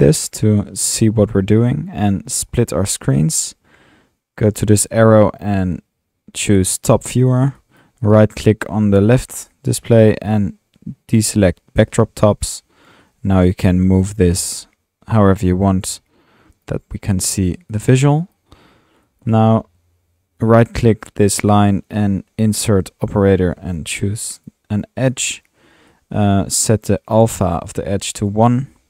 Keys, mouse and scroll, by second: 1.0 click, 2.5 click, 4.8 drag, 5.8 typing, 6.8 click, 8.0 drag, 11.9 click, 13.8 click, 17.5 drag, 18.0-19.4 drag, 21.3 drag, 21.9 click, 23.3-24.3 typing, 24.4 drag, 25.1 drag, 25.9-26.4 drag, 26.4-26.7 drag, 27.2-27.6 drag, 28.2-28.5 drag.